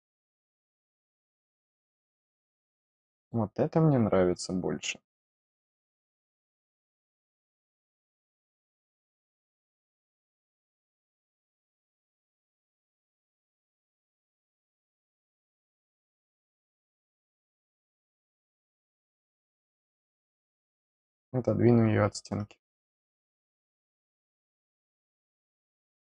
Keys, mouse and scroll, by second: 0.5 click, 0.6 click, 1.8 click, 1.9 click, 3.0 click, 5.7 click, 7.2 click, 9.3-11.7 drag, 13.1 click, 14.4 click, 15.5 middle click, 15.8 middle click, 17.7 click, 18.8 click, 19.8 click, 21.0 scroll down 1, 23.2 click, 23.4 click, 24.5-26.1 middle drag.